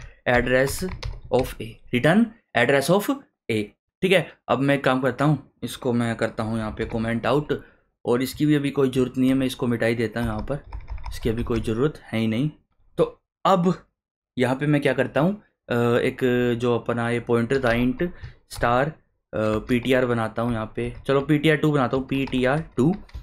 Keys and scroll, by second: 0.0-1.3 typing, 6.8 ctrl+/, 10.2 BackSpace, 17.3-23.2 typing.